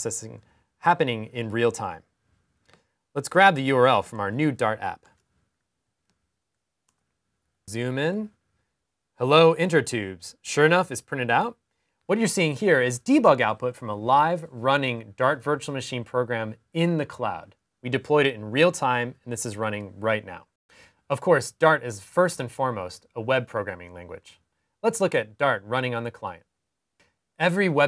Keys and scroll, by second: 4.1 super+c, 5.8 super+t, 6.3 super+t.